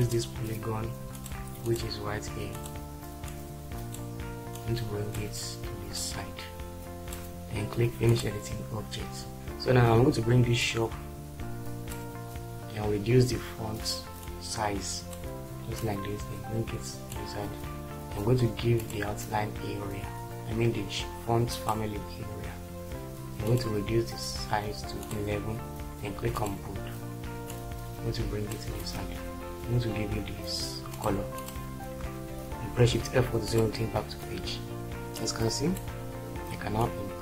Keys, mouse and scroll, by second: 32.7 shift+F4.